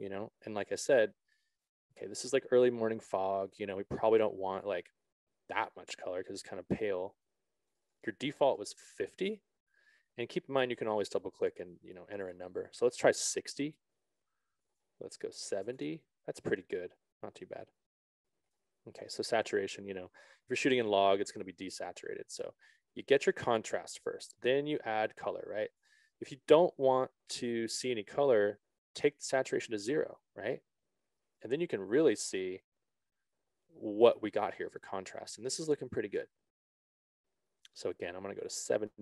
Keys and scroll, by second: 9.0 5, 9.3 Return, 14.2 Return, 15.8 7, 16.2 Return.